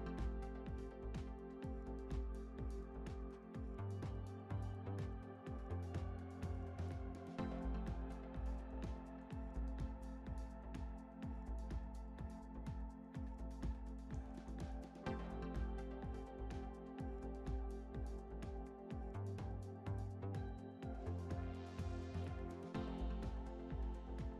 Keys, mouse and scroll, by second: 1.2-1.7 drag, 1.7-2.9 scroll down 2, 2.9 scroll down 1, 2.9-5.9 middle drag, 4.3 click, 5.9 ctrl+click, 7.1-10.0 ctrl+drag, 10.9-11.7 middle drag, 11.7-12.2 scroll down 1, 12.2-14.6 middle drag, 14.6-14.9 scroll up 1, 14.9-15.4 middle drag, 15.4 scroll up 1, 16.6 click, 17.6-19.3 shift+drag, 19.4-20.0 shift+drag, 20.0-20.8 scroll up 4, 21.6-23.7 shift+drag, 21.6 scroll up 2, 23.7 scroll down 1.